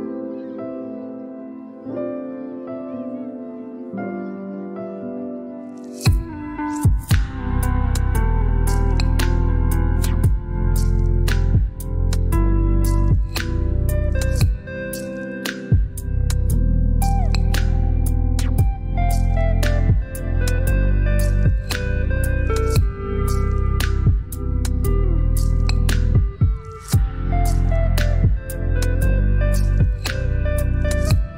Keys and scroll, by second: 11.6 ctrl+z, 22.8 KP_1, 29.5 ctrl+BackSpace.